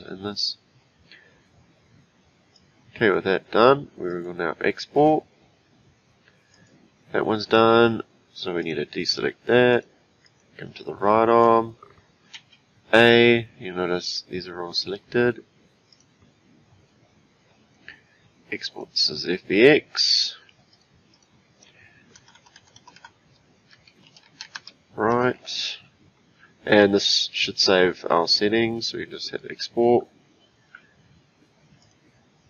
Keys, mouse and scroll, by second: 6.5 click, 8.6 click, 9.0 click, 9.7 click, 10.2 click, 11.4 click, 12.3 a, 15.9-18.9 drag, 31.8 click.